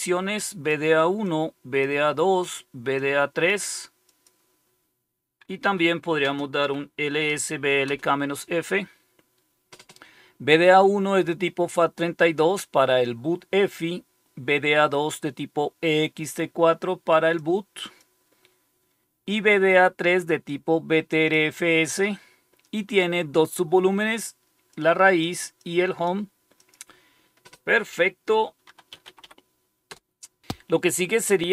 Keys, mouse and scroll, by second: 0.0 click, 1.2 click, 2.2 click, 2.9-4.8 drag, 5.6 Home, 5.8 Up, 6.2-8.3 typing, 17.3 click, 20.4 click, 24.6 click, 25.5 click, 26.5 click, 26.8 click, 28.3-29.6 typing, 29.8 Return.